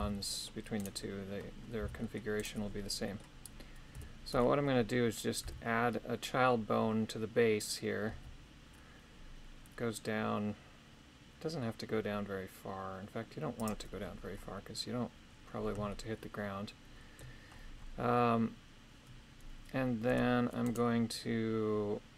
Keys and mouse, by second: 0.0 c, 0.8 right click, 1.8 c, 3.0 middle click, 3.9 KP_3, 5.4 e, 15.9-17.2 shift+middle drag, 20.1 Tab, 20.6 right click.